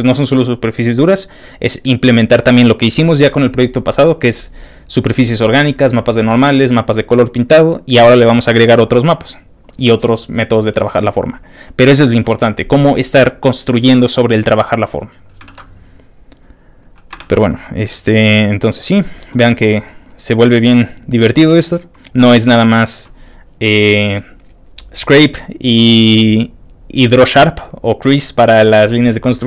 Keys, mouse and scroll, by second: 9.7 scroll up 2, 11.1 scroll down 2, 11.3-15.3 scroll up 2, 15.3 scroll up 1, 15.5 ctrl+w, 16.8 middle click, 16.9 scroll up 1, 17.2 ctrl+w, 18.0 ctrl+middle click, 18.1-20.4 scroll down 9, 20.6 middle click, 21.0 middle click, 21.5 middle click, 22.0 middle click, 22.6 scroll down 1, 22.9 scroll up 2, 23.5-23.9 scroll down 2, 23.9-25.4 scroll up 2, 25.9 scroll up 1, 26.5 scroll down 2, 29.0-29.4 scroll down 5.